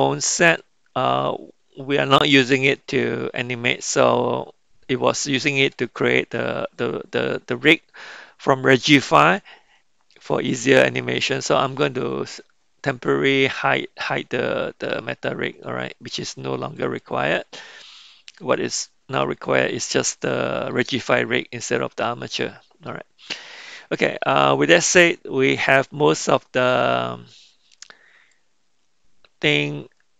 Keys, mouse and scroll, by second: 16.8 click, 19.2-20.7 middle drag, 21.6-22.9 middle drag, 23.2-24.2 middle drag, 28.3-30.1 middle drag.